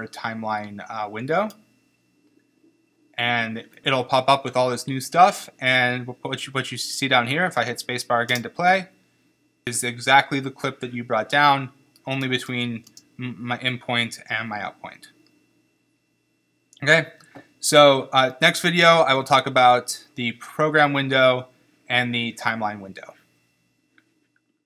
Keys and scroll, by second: 8.3 space, 12.5 b, 12.9 space.